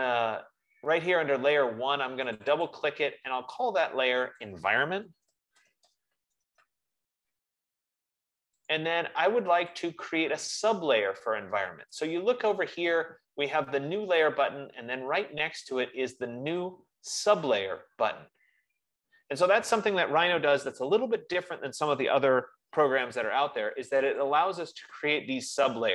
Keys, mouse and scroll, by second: 0.4 click, 2.8 click, 4.6 click, 5.0-7.3 typing, 9.0 click, 10.5 click, 10.9 F15, 24.4-25.9 drag.